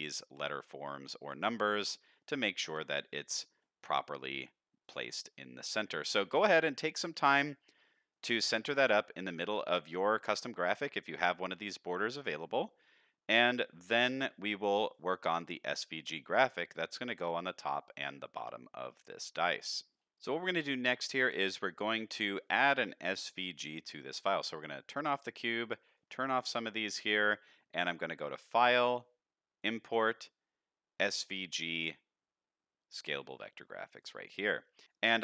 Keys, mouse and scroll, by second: 0.3 click, 0.6 middle click, 2.6 KP_1, 3.6-4.4 middle drag, 4.8 click, 6.4 scroll down 2, 6.8-7.3 middle drag, 7.7-8.1 scroll up 1, 8.1 middle drag, 8.6 middle drag, 9.4-9.8 middle drag, 10.4-10.8 middle drag, 11.9-12.5 middle drag, 12.6-13.0 middle drag, 13.3-13.6 middle drag, 14.3-14.9 middle drag, 15.2 middle click, 15.6 scroll down 2, 15.9 middle click, 17.7-18.1 middle drag, 18.8-20.0 middle drag, 24.9 click, 25.9 click, 26.9 shift+middle drag, 28.4-34.0 drag.